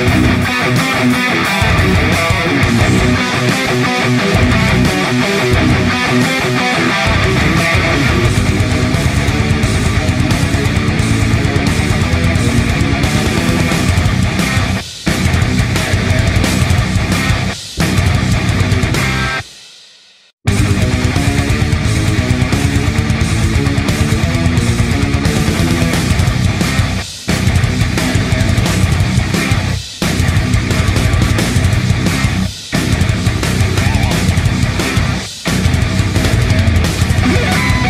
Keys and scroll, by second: 2.1 l, 7.3 shift+F5, 7.7 Return, 14.8 shift+F5, 15.2 Return, 22.6 shift+F5, 23.0 Return, 31.7 shift+F5, 32.1 Return, 34.9 v, 37.3 ctrl+F11.